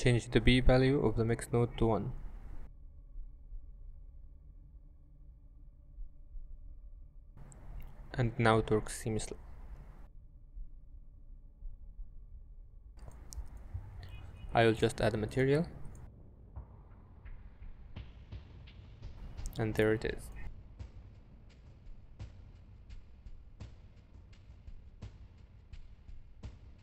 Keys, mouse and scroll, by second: 0.7 middle click, 2.0 middle click, 3.3 click, 4.1 click, 6.1 shift+space, 11.0 shift+space, 12.4 click, 15.7 g, 16.1 shift+a, 18.5 click, 19.7 g, 20.4 middle drag, 21.1 shift+space, 21.5 middle click, 25.6 click, 26.4 click.